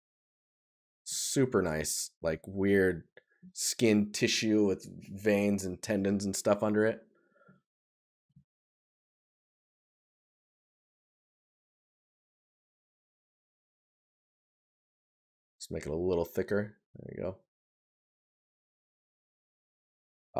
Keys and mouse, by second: 1.0 right click, 7.0 right click, 9.3 right click, 18.4 right click, 20.2 right click.